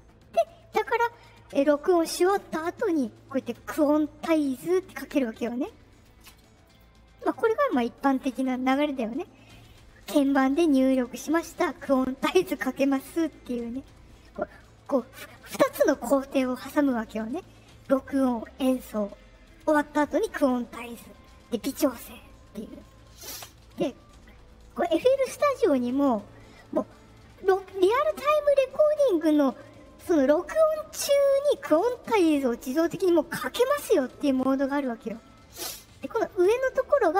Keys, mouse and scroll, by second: 2.4 click, 3.5 click, 6.6 click, 24.6 right click.